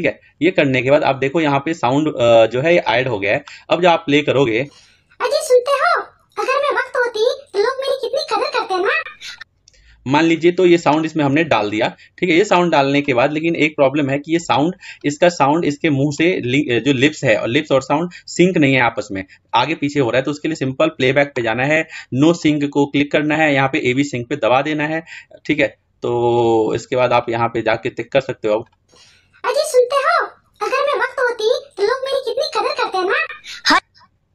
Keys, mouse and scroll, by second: 4.3-6.8 drag, 9.2-11.7 drag, 20.5-23.0 drag, 27.0-31.0 drag, 33.5-34.3 drag.